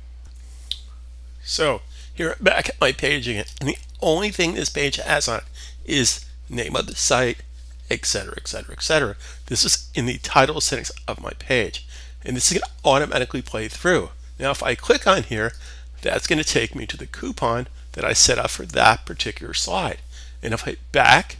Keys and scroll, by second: 1.6 typing.